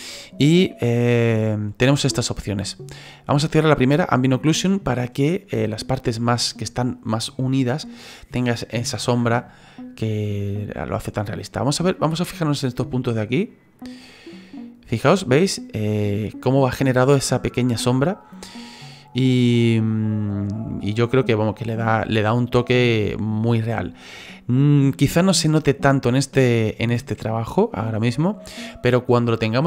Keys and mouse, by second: 14.0 click, 14.6 click, 14.9 click, 17.8 click, 18.2 click, 18.7 click, 19.0 click.